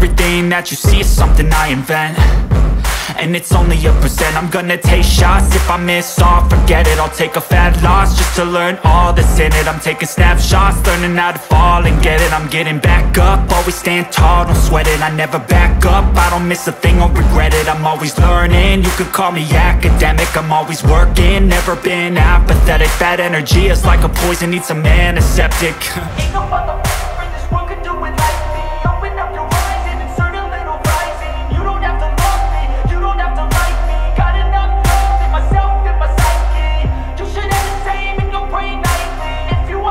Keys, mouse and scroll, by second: 1.7 space, 2.8 click, 5.7-6.4 scroll down 1, 12.1 click, 13.6 scroll up 1, 14.8 click, 17.0 scroll up 1, 17.9 click, 19.5 scroll down 1, 21.5 space, 23.5-23.9 scroll up 1, 24.3-26.8 drag, 28.9-30.1 scroll down 1, 30.6-32.0 drag, 32.0 scroll down 1, 33.3 space, 34.0 scroll up 1, 35.1 click, 35.4 scroll down 1, 36.2 click, 36.6-37.2 scroll up 1, 37.2-39.9 drag.